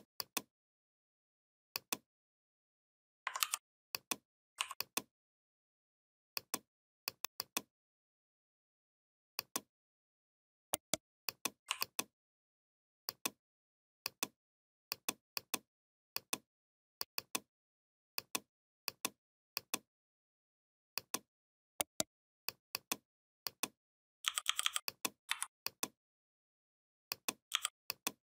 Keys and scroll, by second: 3.2 ctrl+g, 24.1 i, 25.1 v, 27.3 i.